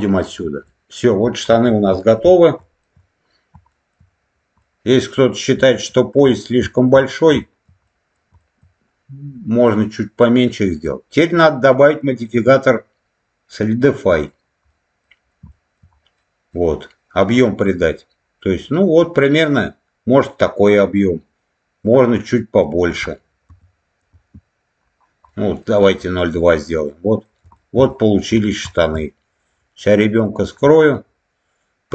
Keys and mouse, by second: 0.0 click, 0.5 middle click, 1.9 shift+middle click, 2.6 shift+middle click, 3.6 shift+middle click, 4.5 middle click, 5.6 alt+middle click, 6.6 shift+middle click, 7.3 shift+middle click, 7.7 middle click, 8.3 shift+middle click, 9.5 middle click, 11.8-14.2 drag, 14.6 middle click, 15.4 shift+middle click, 16.1 middle click, 17.4 middle click, 18.5 middle click, 21.8-24.4 drag, 25.2 middle click, 25.9-27.1 middle drag, 27.4 shift+middle click, 27.8 middle click, 28.6 shift+middle click, 30.1 click, 30.6 middle click.